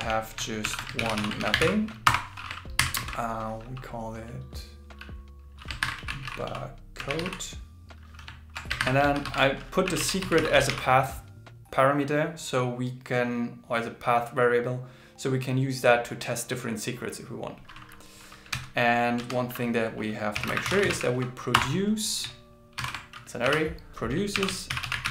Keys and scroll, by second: 0.6 alt+l, 1.0 shift+g, 1.4 shift+m, 2.5-3.5 typing, 5.8 shift+7, 8.8 shift+7, 9.2 alt+8, 10.3 alt+9, 22.8 alt+6, 24.5-25.1 typing.